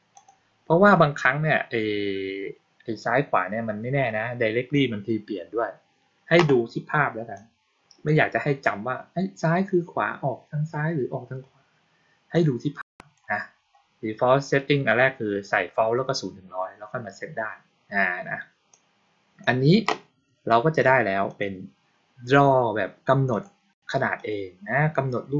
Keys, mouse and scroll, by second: 0.0 click, 7.2-8.1 drag, 12.2-13.1 drag, 18.6-19.3 drag, 21.2 click, 23.2 click, 24.1 click.